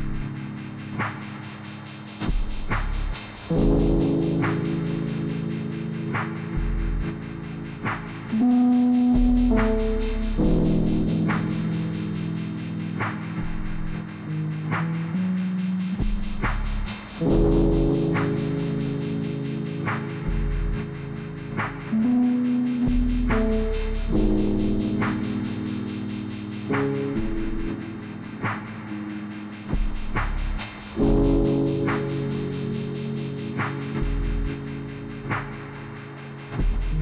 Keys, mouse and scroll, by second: 15.7 click, 17.5 click, 18.2 scroll up 1, 19.0 click, 20.8 scroll down 1, 21.4 click, 23.1 click, 24.4 click, 27.4 ., 27.9 click, 29.1 click, 30.2 click, 30.6 scroll down 1, 31.2-33.2 drag, 33.2 r, 33.5 click, 34.1 e, 34.4 click, 35.1 click, 35.4-35.9 scroll down 1, 35.9 click, 36.9 r.